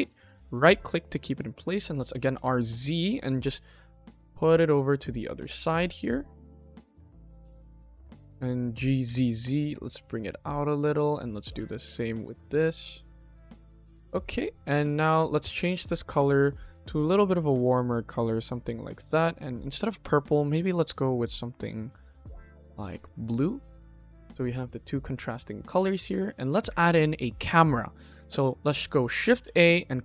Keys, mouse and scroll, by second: 1.9 r, 8.0 g, 11.1 click, 11.5 g, 13.4 click, 13.6 KP_1, 14.1 click, 14.5-14.9 middle drag, 15.1 click, 15.4 click, 16.3 click, 19.4 click, 20.1 click, 23.2 click, 23.9 ctrl+s, 24.6-25.1 middle drag, 25.4 click, 26.6 shift+a, 29.2 shift+a.